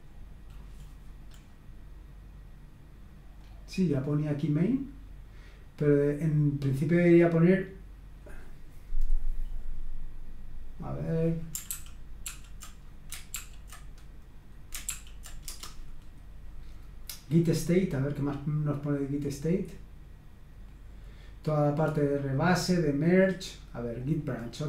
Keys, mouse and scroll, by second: 1.3-3.1 scroll up 1, 3.1-3.9 scroll down 1, 3.9-4.8 scroll down 1, 10.7 click, 11.7 ctrl+p, 12.2 ctrl+p, 13.3 ctrl+p, 14.9 ctrl+p, 15.5 Return, 18.1 click, 19.9-21.9 scroll down 2, 22.4-23.5 scroll down 2, 24.0-24.6 drag.